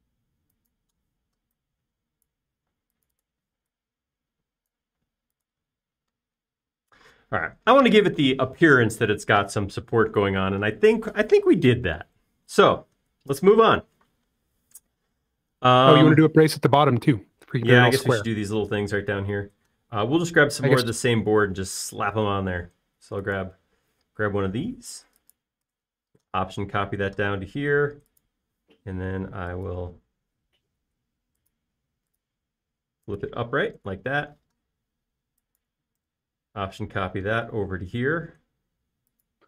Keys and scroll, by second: 1.6-2.5 typing, 3.6-4.4 typing, 6.0 space, 25.0 m, 29.5 q, 31.6 Escape, 34.9 space, 35.3 m.